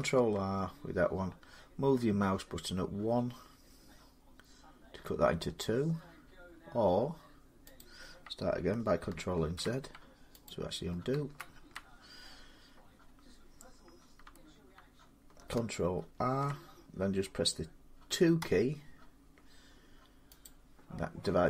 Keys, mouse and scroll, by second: 2.2 middle click, 7.6 click, 9.2 ctrl+z, 10.3 click, 11.0 ctrl+z, 16.0 ctrl+r, 18.2 2, 20.3 click.